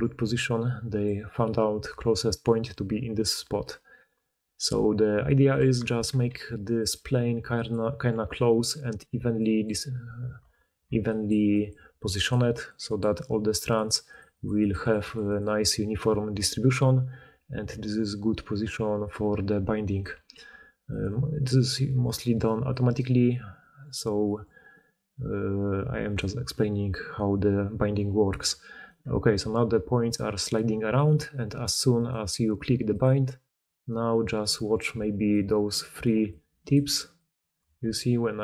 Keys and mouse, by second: 0.0-3.6 typing, 2.4-7.4 drag, 5.4 d, 5.8 Tab, 6.2 r, 7.0 g, 9.0-15.4 typing, 9.3 click, 9.3 middle click, 9.3 right click, 10.3 Tab, 13.2 drag, 13.2 middle drag, 13.2 right drag, 15.4-22.4 drag, 15.4-21.0 middle drag, 15.4-21.0 right drag, 19.9 d, 20.2 g, 22.4-22.8 middle drag, 22.8 click, 22.9-24.5 middle drag, 24.5 click, 24.6-26.0 middle drag, 26.0 click, 26.1-28.6 middle drag, 28.6 right click, 28.8-31.6 middle drag, 29.2 g, 31.6 click, 31.6 middle click, 31.8 click, 32.0-32.9 middle drag, 32.9-38.4 drag, 33.7 right click, 34.8-37.0 d, 37.4 d, 37.5 d, 37.7 g.